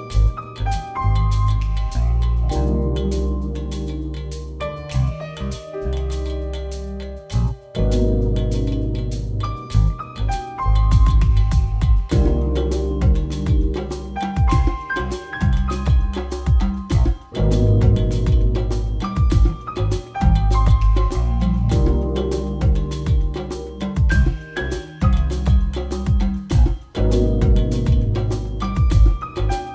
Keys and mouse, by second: 0.4 b, 0.4 a, 0.7 b, 0.8-1.3 drag, 1.3 ctrl+c, 1.8 click, 2.1 ctrl+c, 2.6 i, 2.7 a, 2.9 ctrl+z, 3.6 ctrl+c, 4.7 ctrl+v, 4.8 a, 8.0 click, 8.0 g, 8.1 click, 8.7 ctrl+c, 8.8 ctrl+v, 9.5 ctrl+z, 10.4 a, 10.6 g, 11.8 g, 12.0-12.3 drag, 12.4 r, 12.8 drag, 13.5 r, 13.8 g, 14.8-17.3 typing, 18.4 r, 18.8 g, 18.8 r, 20.1 ctrl+c, 20.7 a, 20.7 shift+d, 21.2 drag, 22.6 click, 22.7 e, 23.6-24.7 drag, 25.0 a, 25.0 b, 25.0 g, 27.1 a, 27.1 b, 27.1 g, 28.4 a, 28.8 a, 28.8 b, 28.8 g.